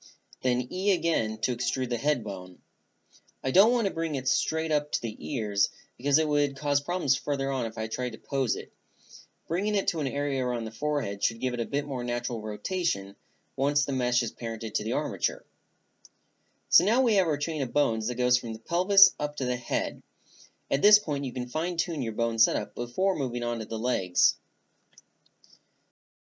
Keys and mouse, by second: 0.8 click, 1.5-5.1 right drag, 4.4 click, 5.1 e, 9.3 right click, 10.0-10.6 drag, 10.6-11.1 right drag, 11.1-12.7 middle drag, 11.1 a, 12.7-15.3 right drag, 19.2-21.4 middle drag, 24.0-24.9 drag, 24.9-26.3 middle drag.